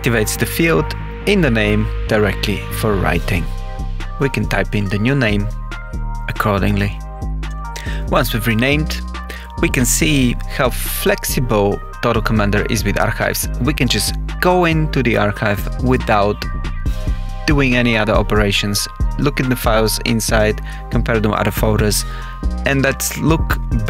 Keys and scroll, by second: 0.0-1.9 typing, 2.9 shift+-, 4.0-6.9 typing, 9.8 Return, 13.9 Return, 14.6 Page_Down, 16.1 Tab, 16.8 Tab, 17.4 Tab.